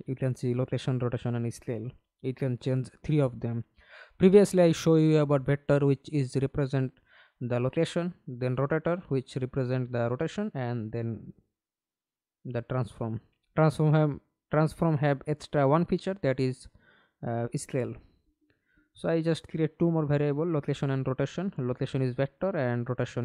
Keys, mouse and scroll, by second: 1.9-3.1 scroll up 1, 5.0 double click, 7.1 scroll down 4, 9.4 right click, 9.5-11.5 typing, 15.5-18.0 typing.